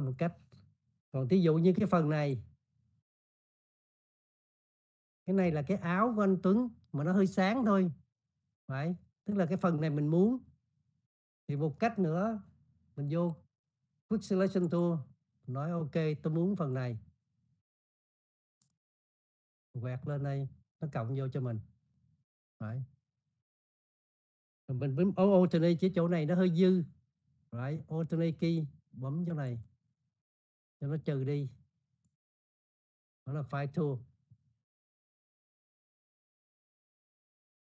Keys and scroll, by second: 5.6 space.